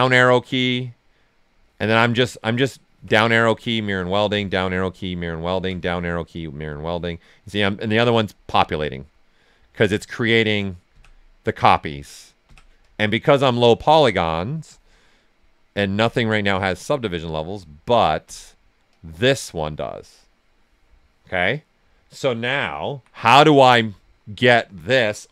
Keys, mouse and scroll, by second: 0.4 click, 1.9 right click, 2.9 Down, 3.5 click, 4.2 Down, 5.0 click, 5.5 Down, 6.3 click, 7.1-8.4 right drag, 8.4 Down, 8.9 click, 9.7 Down, 10.1 click, 10.9 Down, 11.7 click, 12.4 Down, 12.8 click, 13.8 Down, 14.2 click, 14.2 typing, 14.9 right click, 15.9 Down, 16.2 click, 16.9 right click, 18.2 Down, 18.9 click.